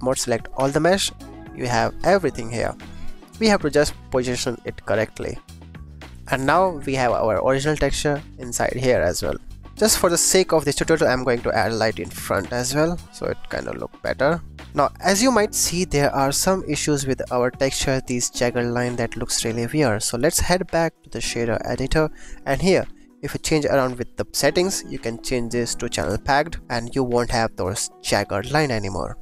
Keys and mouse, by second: 0.6 a, 4.0 g, 4.0 z, 6.0 s, 6.1 Tab, 6.9 ctrl+s, 7.0 click, 9.6 click, 10.9 shift+d, 11.3 click, 11.5 r, 12.1 click, 12.3 g, 12.8 click, 14.5 ctrl+s, 15.3 shift+click, 19.9-22.1 drag, 22.5 click, 23.2 click, 23.8 click, 24.3 click, 24.9-26.1 drag.